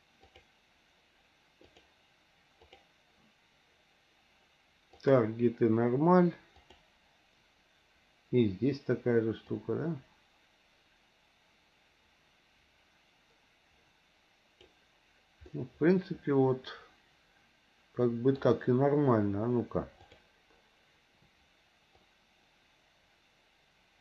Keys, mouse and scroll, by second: 1.6-2.9 drag, 4.9-6.8 drag, 9.5-14.6 drag, 15.5-18.4 middle drag, 20.0 click, 22.0-24.0 drag.